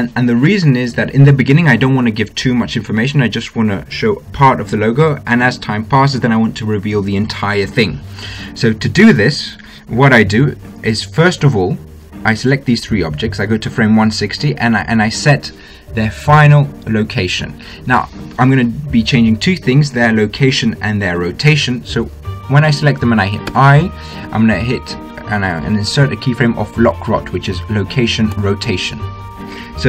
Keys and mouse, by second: 14.3-16.1 drag, 24.3 i.